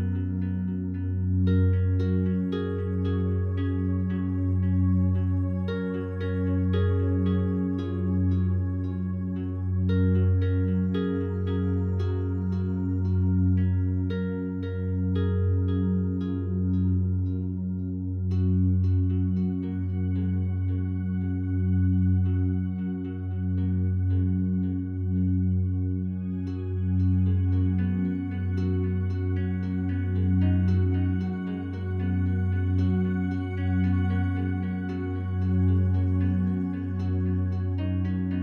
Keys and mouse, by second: 4.2-4.6 alt+drag, 4.9 ctrl+alt+click, 5.4-6.9 alt+drag, 7.4 typing, 8.8 g, 9.2 y, 10.2 click, 10.7-14.3 drag, 14.1-14.8 typing, 14.9 ctrl+z, 19.6 shift+s, 20.4 click, 23.6 click, 24.3 click, 26.0 click, 26.7 click, 27.3 click, 28.5 click, 30.2 click, 31.3 click, 31.4 click, 32.3-35.3 typing, 35.5 Return, 36.8 click, 37.7 middle click, 37.9 click.